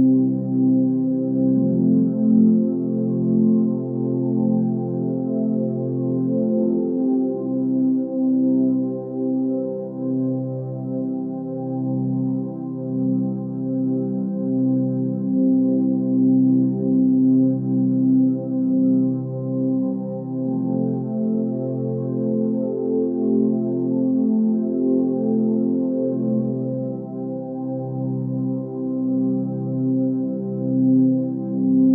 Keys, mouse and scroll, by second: 0.9-6.0 drag, 19.5-20.1 scroll up 1, 21.1-22.0 click.